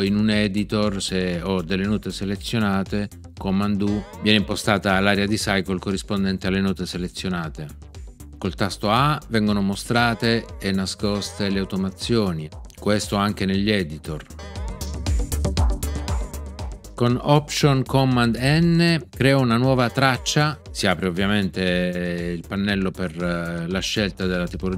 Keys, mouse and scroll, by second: 3.8 super+u, 9.9 a, 14.3 a, 19.7 alt+super+n.